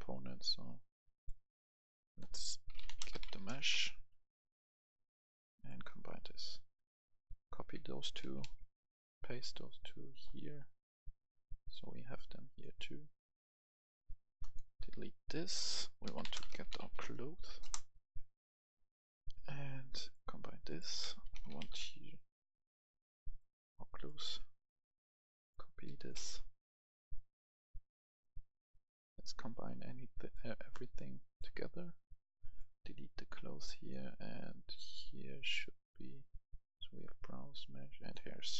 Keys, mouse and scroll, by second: 0.1-1.5 drag, 2.8-3.4 typing, 3.5 Return, 4.6 click, 5.9 right click, 7.4 shift+click, 8.2 ctrl+c, 8.4 ctrl+v, 9.7-16.8 drag, 14.6 Delete, 16.0-16.9 typing, 17.6 Return, 18.7-20.5 drag, 21.0-23.0 typing, 23.2 click, 24.0 right click, 24.6 click, 25.8 c, 26.1 y, 26.5-35.5 drag, 26.5 c, 26.5 y, 32.7 Delete, 36.4 right click, 37.9 click.